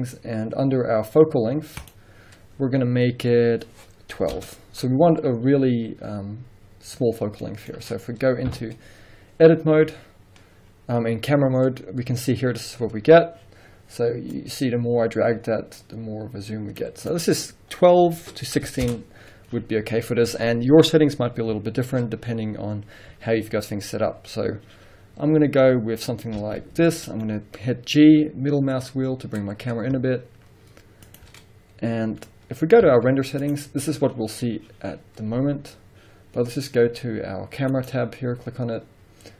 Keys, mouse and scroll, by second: 1.9-7.5 drag, 4.4 2, 7.5-14.4 middle drag, 8.5 KP_0, 11.5-13.1 scroll up 2, 13.1-14.4 scroll up 1, 14.4-31.3 drag, 18.9 Return, 26.4 g, 31.9-32.5 scroll down 1, 32.5-32.9 scroll up 1, 32.9 z, 34.3-36.8 scroll up 1, 37.8 click.